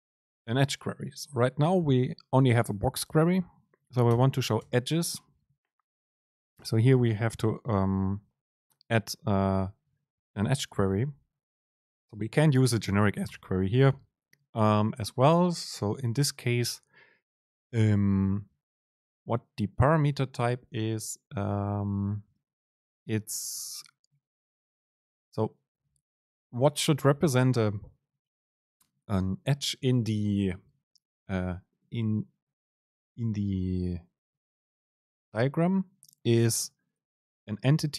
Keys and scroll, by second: 4.2 Return, 4.7 super+space.